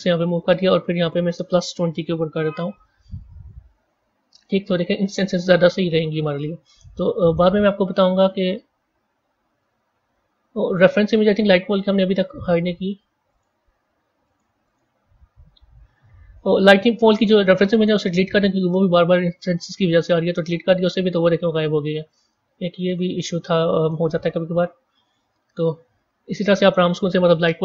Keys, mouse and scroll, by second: 1.2-4.2 drag, 4.3-4.8 scroll down 7, 7.1-8.5 middle drag, 8.5-9.4 scroll up 7, 12.2 click, 13.2 click, 14.2 click, 14.6 click, 17.0 click, 17.7-20.7 right drag, 21.3 scroll down 4, 22.0-25.9 middle drag, 25.9-27.6 scroll down 2.